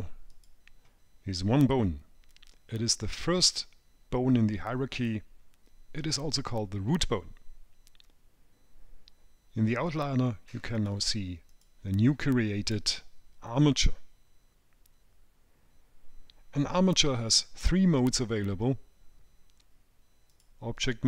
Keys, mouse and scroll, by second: 0.6 click, 11.1 click, 11.8 click, 20.6 click.